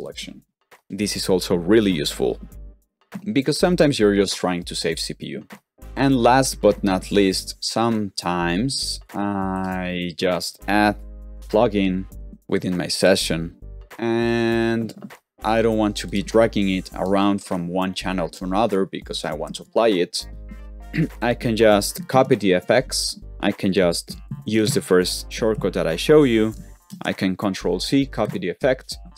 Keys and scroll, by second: 0.6 super+v, 0.6 Return, 11.2 ctrl+alt+shift+5, 13.6-15.1 typing, 18.9 super+z, 19.3 super+z, 22.0 ctrl+c, 23.2 `, 24.5 `, 26.8 ctrl+c.